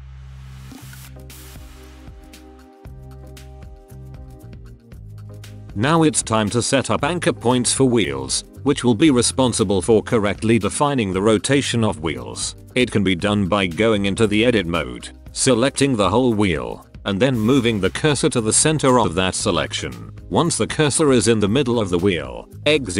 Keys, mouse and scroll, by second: 0.1 ctrl+c, 0.5 ctrl+v, 1.0-2.1 drag, 1.6 e, 2.1 ctrl+c, 2.6 click, 2.9 ctrl+v, 2.9 drag, 3.4 middle click, 3.8-5.0 drag, 4.7 e, 5.0 ctrl+c, 5.2 click, 5.5 ctrl+v, 5.5 middle click, 6.9 click, 7.1-10.4 drag, 10.4-11.7 right drag, 10.4 e, 12.2-12.6 middle drag, 12.8 right click, 13.4 Tab, 13.6 a, 13.8 a, 14.0 a, 14.3 shift+s, 16.3 drag, 16.6 middle click, 16.9 Tab, 18.0 ctrl+alt+shift+c, 19.0 space, 22.8 Down.